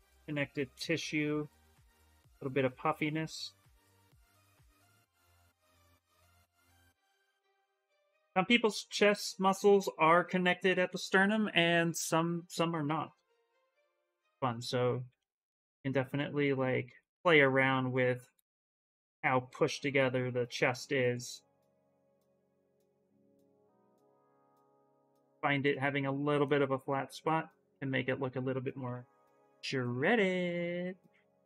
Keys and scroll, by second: 13.0-14.7 typing, 20.0 s, 28.4-29.7 typing.